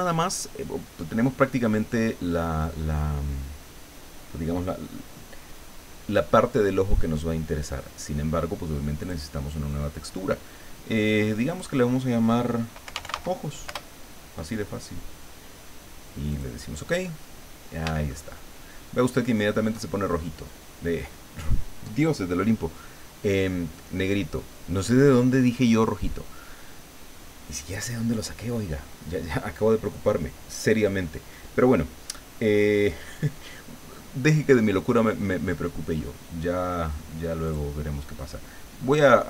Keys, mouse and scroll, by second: 9.0 click, 11.5 click, 12.6-13.6 typing, 13.7 Return, 16.3 click, 17.2-17.6 scroll down 1, 18.1-19.8 shift+middle drag, 34.5-36.1 middle drag, 37.4 click.